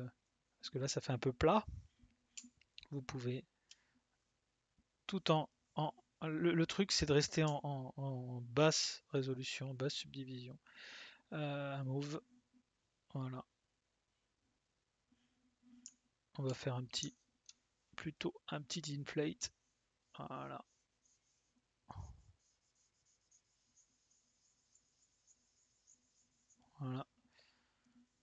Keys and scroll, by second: 2.3 s, 7.4 s, 15.8 s.